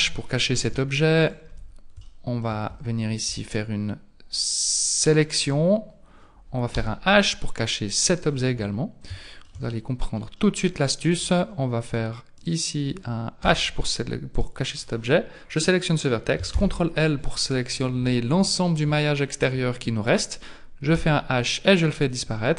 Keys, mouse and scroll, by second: 0.3 scroll up 3, 0.6 Tab, 1.2 right click, 1.5 Tab, 2.0 shift+middle click, 2.8 scroll up 1, 5.0 alt+right click, 6.8 h, 8.3 scroll down 5, 9.2 shift+middle click, 10.4 middle click, 11.5 scroll up 3, 12.4 alt+right click, 13.4 h, 14.4 right click, 16.6 ctrl+l, 17.5 scroll down 3, 18.1 middle click, 19.0 shift+middle click, 21.0 h, 21.5-22.1 scroll up 3, 22.1 scroll down 3.